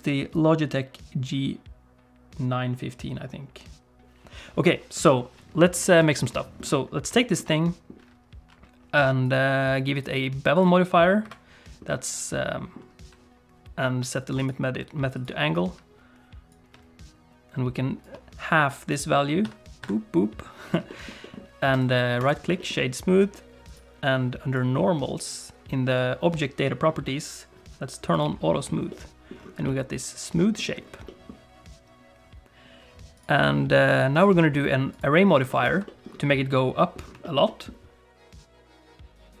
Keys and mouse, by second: 6.1 shift+middle click, 6.3 middle click, 7.1 shift+middle click, 7.5 middle click, 9.2 click, 9.9 click, 11.2 KP_Decimal, 11.8 middle click, 14.3 click, 16.6-18.1 shift+drag, 19.4 click, 20.9 shift+middle click, 21.2 middle click, 21.9 right click, 22.5 shift+middle click, 23.6 click, 28.1 click, 28.9 middle click, 29.6 middle click, 31.0 middle click, 33.2-35.0 drag, 35.6 shift+middle click, 35.8 middle click, 37.2 shift+middle click, 37.4 middle click.